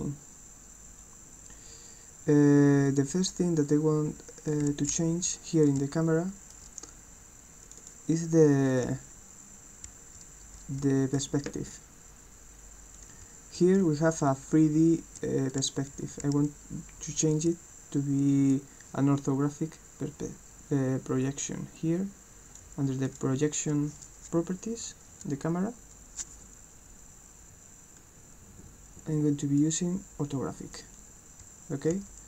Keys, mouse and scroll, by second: 4.6 d, 5.0 s, 5.8 w, 7.6 click, 7.8 click, 8.7-11.2 right drag, 8.9 w, 9.8 d, 10.8 w, 13.0-18.5 right drag, 13.2 w, 13.8 s, 14.3 a, 15.6-17.5 typing, 21.2-22.6 drag, 23.1 click, 28.0-29.6 drag, 30.8-32.2 right drag, 31.4-32.2 typing.